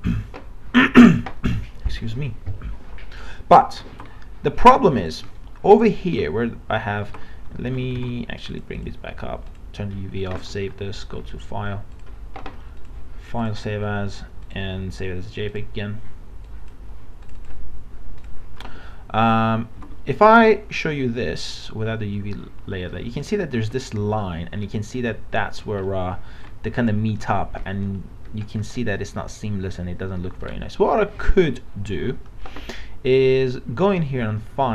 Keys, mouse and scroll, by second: 4.0 alt+Tab, 5.0 click, 5.4-7.1 alt+middle drag, 7.1 alt+Tab, 7.7 alt+Tab, 8.5 click, 10.4 ctrl+s, 10.9-17.2 drag, 19.8 alt+Tab, 20.6-22.6 middle drag, 25.9 alt+middle click, 28.0-28.8 scroll up 1, 30.5 scroll down 1, 31.3 alt+Tab.